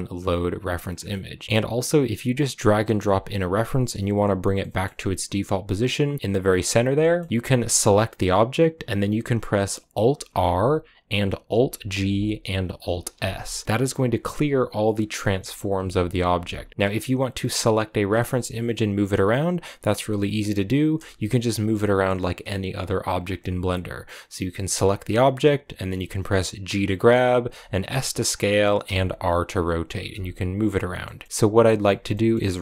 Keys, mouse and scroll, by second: 0.0 click, 0.8 scroll down 2, 0.9-2.2 middle drag, 2.2 x, 3.9-4.5 scroll up 1, 4.5-6.7 middle drag, 6.7 scroll down 1, 6.9-8.0 middle drag, 8.0 g, 10.8 alt+r, 16.0 g, 18.8 a, 24.6-26.8 right drag, 26.8 g, 28.1 s, 29.8 r, 30.0 r, 30.8 scroll down 1, 30.9 middle click, 31.1 scroll up 1, 31.2 scroll down 2, 31.5 middle click, 32.4-32.6 scroll up 1.